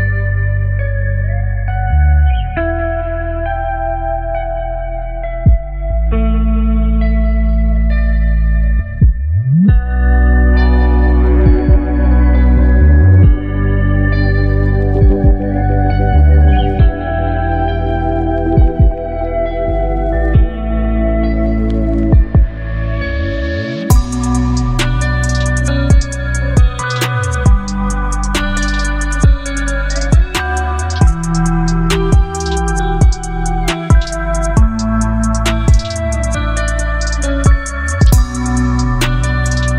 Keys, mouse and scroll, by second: 0.5-1.2 alt+drag, 4.2 v, 4.6 ctrl+t, 7.5-9.1 shift+drag, 11.1 alt+scroll down 2, 12.3-14.5 shift+drag, 17.0-19.2 shift+drag, 24.2-24.7 shift+drag, 25.9-26.8 shift+drag, 29.6 ctrl+0, 30.9-31.5 alt+scroll up 2, 32.0 space, 32.1-32.8 click, 32.5 space, 34.5 click.